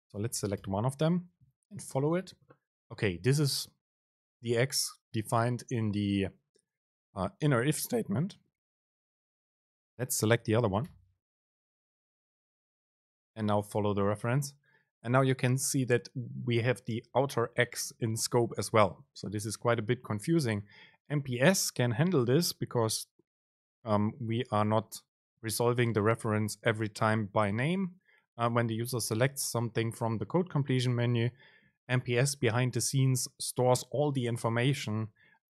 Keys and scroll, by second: 2.2 super+b, 9.4 super+space, 12.5 super+b, 29.9 super+space.